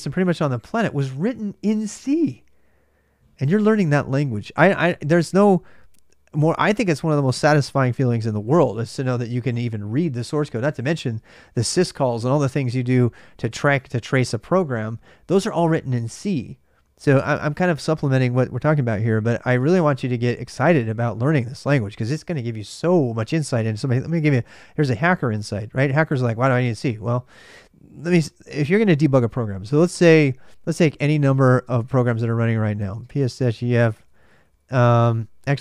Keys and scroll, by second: 0.0-35.6 typing.